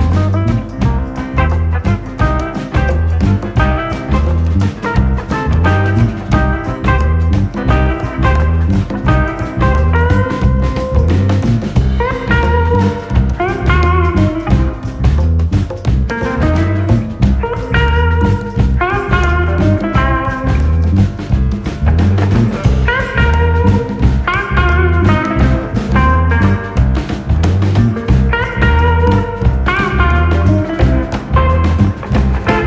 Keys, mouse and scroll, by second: 0.5 scroll down 3, 0.7 middle drag, 1.0 click, 1.1-1.5 middle drag, 1.5 scroll up 1, 1.6-2.1 middle drag, 2.1 click, 2.2 KP_7, 2.4-2.7 scroll up 1, 2.7 Tab, 3.5 alt+/, 5.4 r, 7.1 Tab, 7.4 KP_3, 7.9 KP_1, 9.4 click, 9.7 click, 10.1-11.9 drag, 11.9 Tab, 12.3 click, 13.7 r, 15.1 Tab, 15.4 alt+/, 15.8 middle click, 16.2 click, 16.3 middle click, 17.3-17.7 scroll up 3, 17.7 click, 18.4 3, 18.6 click, 18.9 KP_3, 19.2-19.5 scroll up 2, 19.5 shift+middle click, 20.0 g, 20.6 r, 21.3 s, 22.5 click, 23.0 g, 24.5-25.5 drag, 26.0 click, 26.6 e, 28.3 click, 28.6 click, 29.0 g, 30.9 ctrl+s, 31.3 Tab, 31.7 click, 32.2 scroll down 1, 32.4-32.6 shift+middle drag.